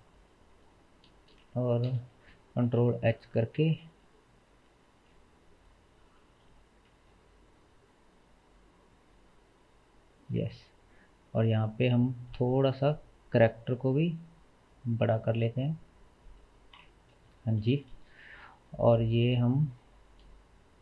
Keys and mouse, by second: 1.2 space, 1.9 space, 2.7 alt+h, 4.4 click, 6.4 g, 12.6 s, 16.8 KP_0, 18.6 click, 19.4 h, 19.8 middle click, 20.7-20.8 drag.